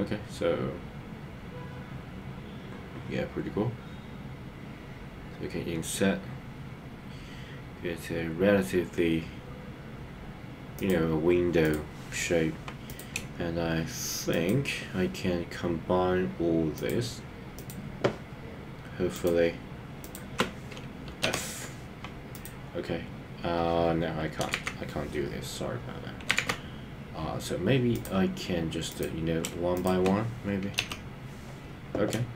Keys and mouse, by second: 10.7 click, 12.9 click, 16.7 shift+click, 20.0 shift+click, 21.2 f, 22.3 click, 24.6 super+z, 26.5 super+z, 27.9 click, 28.9 click, 29.7 shift+click, 30.8 f.